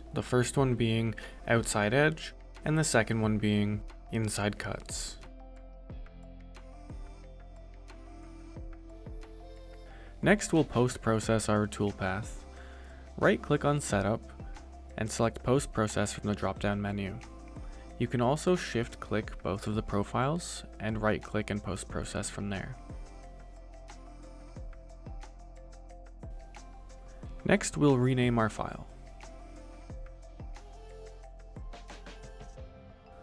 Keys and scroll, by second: 0.4 Return, 7.4-8.2 typing, 9.2 c, 9.2 u, 9.3 t, 9.4 s.